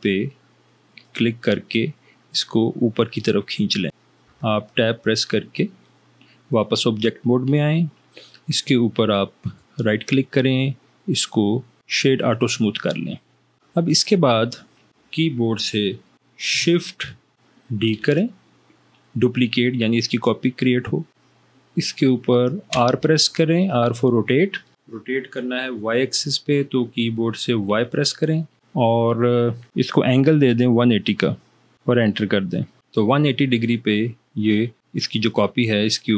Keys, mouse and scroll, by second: 4.3 Tab, 18.0 shift+d, 22.9 r, 27.8 y, 31.9 0, 32.9 Return.